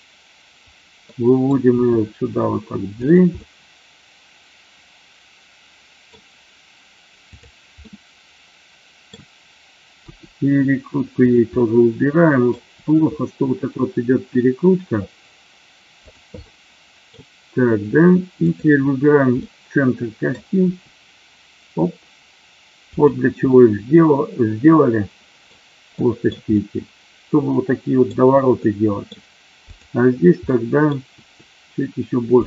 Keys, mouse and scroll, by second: 1.0-1.5 middle drag, 1.7 g, 3.0 click, 3.2-6.1 middle drag, 7.9-9.1 middle drag, 10.0 r, 11.2 click, 11.5 middle click, 12.7 r, 16.0 click, 16.5 middle click, 18.5 click, 19.5 middle click, 20.6 r, 22.8 click, 23.5-25.5 middle drag, 26.0 middle drag, 26.5-28.1 middle drag, 28.6-29.0 middle drag, 29.7 click, 30.5-30.8 middle drag, 31.1 r, 32.3 click.